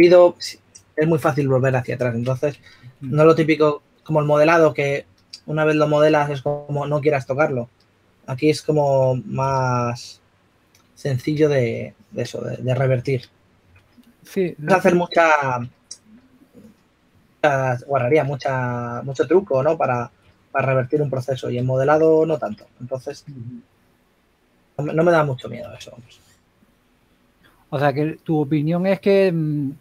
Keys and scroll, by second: 5.2 2, 7.5 typing, 9.8 typing, 13.0-14.8 typing, 17.9 typing, 20.2-20.8 typing, 23.5-25.0 typing, 26.2-27.5 typing.